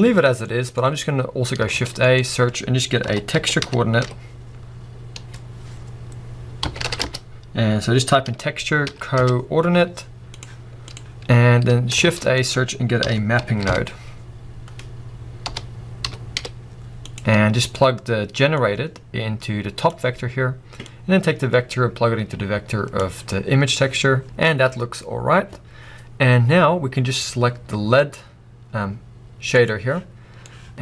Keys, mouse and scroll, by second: 9.7-10.8 middle drag, 9.7-10.4 scroll up 1, 10.4-10.8 scroll up 1, 12.6 shift+a, 19.9-24.0 drag, 24.2-26.7 scroll down 2, 26.7-27.1 scroll up 2, 28.9 click, 28.9 right click.